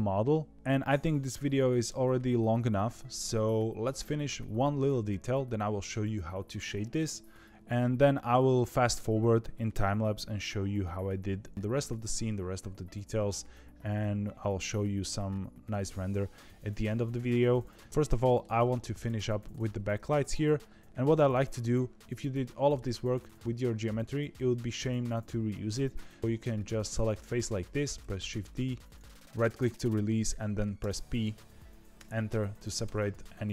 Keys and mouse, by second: 17.1 middle click, 18.1 shift+middle click, 18.9 click, 19.2 middle click, 19.7 Tab, 26.3 3, 26.6 click, 27.9 shift+d, 30.7 p, 32.8 Tab, 33.0 click, 33.4-33.5 middle drag.